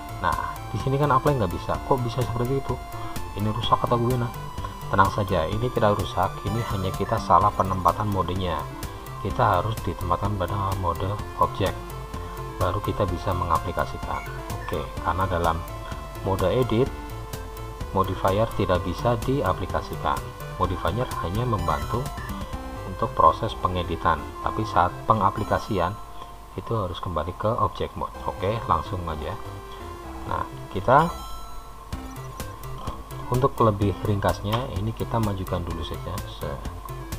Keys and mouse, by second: 28.4-30.0 middle drag, 31.7 KP_3, 35.4 g.